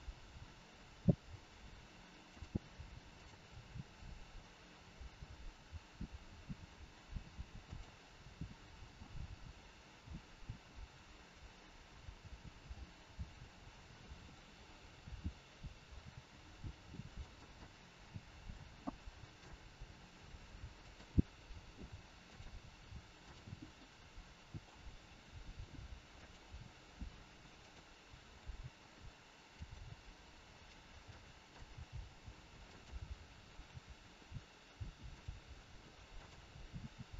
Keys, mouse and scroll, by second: 3.1 click, 3.4 g, 8.9 middle click, 13.9 click, 14.6 middle click, 14.6 scroll up 1, 16.0 g, 17.5 middle click, 18.8 scroll up 1, 18.9 middle click, 19.6 g, 21.6 r, 23.2 click, 23.9 middle click, 25.0 r, 27.5 click, 28.4 g, 29.9 middle click, 31.0 middle click, 31.7 g, 33.7 r, 36.1 click, 36.7 r.